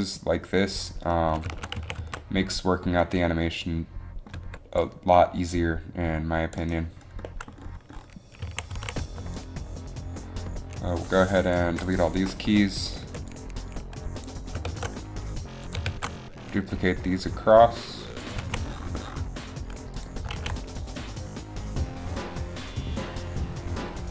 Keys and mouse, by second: 2.0 a, 2.2 z, 4.6 c, 8.7 a, 8.9 a, 9.1 b, 11.8 Delete, 12.1 Delete, 12.1 a, 12.1 b, 12.5 Delete, 13.3 b, 14.8 shift+d, 16.2 shift+d, 18.6 a, 20.5 alt+a, 22.2 alt+a.